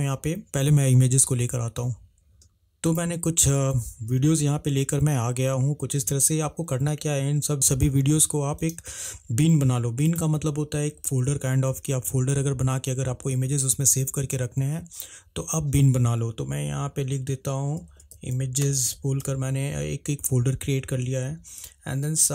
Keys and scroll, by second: 18.0-19.0 typing.